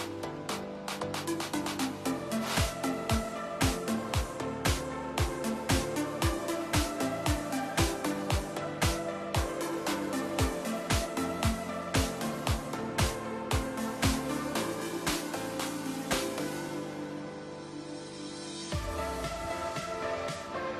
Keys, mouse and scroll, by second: 0.0 KP_0, 4.1 click, 6.9 click, 7.4-9.9 drag, 11.4 click, 13.9 click, 14.4-16.9 right drag, 17.8 click, 18.3-18.7 middle drag, 18.7-19.8 scroll up 3, 19.8-20.4 shift+middle drag, 20.4-20.7 scroll down 1.